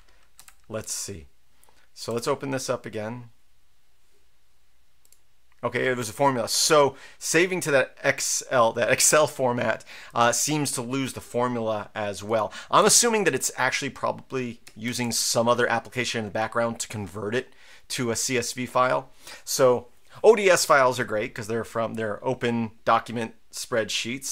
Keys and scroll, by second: 0.4 Up, 0.8 Up, 2.1 Return, 12.8 super+q, 14.8 ctrl+l.